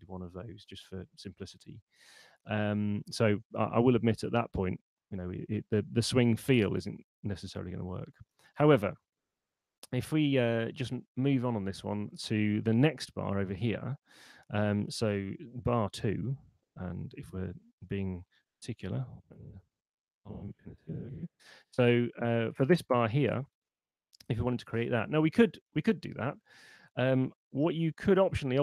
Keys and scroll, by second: 16.1 r, 18.6-19.6 typing.